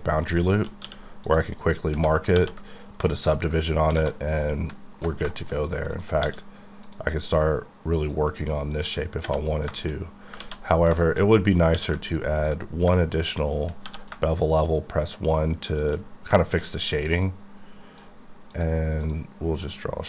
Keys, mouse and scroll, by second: 1.3 click, 1.7 scroll down 1, 2.4 ctrl+1, 3.1 shift+middle click, 3.3-4.4 shift+scroll down 5, 4.0 alt+a, 4.4 middle click, 5.6-5.9 scroll up 1, 6.2 d, 6.9 click, 7.4 click, 9.8 shift+middle click, 10.4-11.4 ctrl+scroll up 11, 10.4 ctrl+z, 11.0 shift+middle click, 11.8 q, 11.9 q, 12.4 ctrl+click, 13.9 1, 15.8 shift+click, 16.2-17.2 scroll down 7, 16.4 middle click, 17.2 click, 18.5 click, 19.6 click.